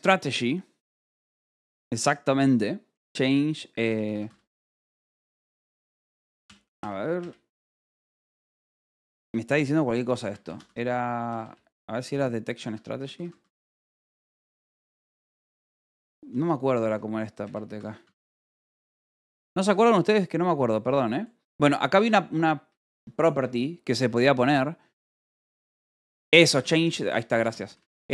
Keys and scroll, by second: 3.7-5.5 typing, 7.1 BackSpace, 9.7-11.6 typing, 12.6 Tab, 12.7-15.1 typing, 16.3-18.9 typing, 21.8 space, 22.5 BackSpace, 22.8 c, 23.9 BackSpace, 26.1-28.1 typing.